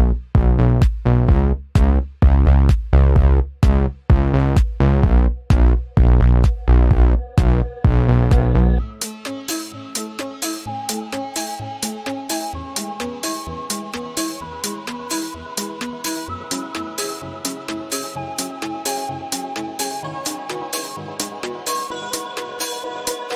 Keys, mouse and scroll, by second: 5.8 click, 6.7 right click, 8.3 click, 9.6 click, 12.2 click, 13.7 click, 14.9 ctrl+z, 15.2-23.3 drag.